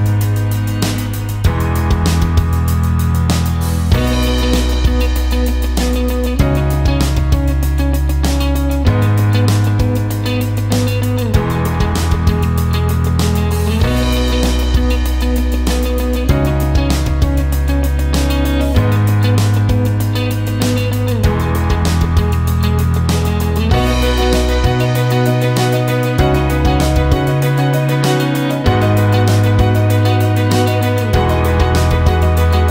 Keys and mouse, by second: 4.5 click, 5.6 click, 6.7 ctrl+x, 8.1 click, 9.0 ctrl+x, 10.3 click, 13.2 ctrl+z, 15.5 ctrl+z, 19.1 ctrl+x, 21.0 click, 22.6 shift+click, 24.0 click, 24.9 ctrl+x, 27.5 click, 28.7 shift+click, 29.5-32.2 right drag, 32.2-32.7 drag.